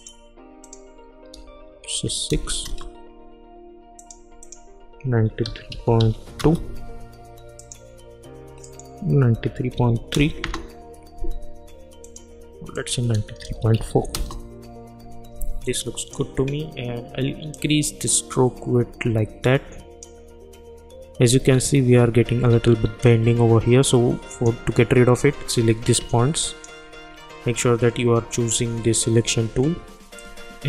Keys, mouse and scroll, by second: 0.0 click, 2.6 Return, 4.0 click, 6.4 Return, 7.6 click, 10.4 Return, 12.0 click, 14.1 Return, 16.1-21.5 drag, 21.5-22.0 alt+scroll up 1, 22.8-23.3 alt+scroll down 1, 24.3 click, 26.4 shift+click, 30.1-30.6 drag.